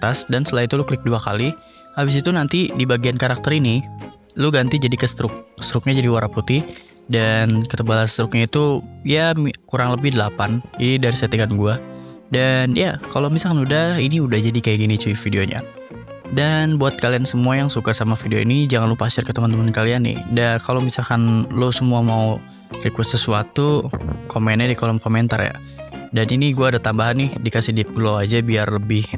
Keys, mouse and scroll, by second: 0.1 click, 1.8 click, 1.9 click, 5.5 click, 8.5 click, 9.8 8, 10.8 click, 11.5 ctrl+s, 12.8 click, 13.6 click, 18.1 click, 24.6 click, 25.2 click, 25.6 ctrl+space, 25.8-27.0 typing, 26.8 click, 27.3 ctrl+s, 27.9 click, 28.7-29.1 drag.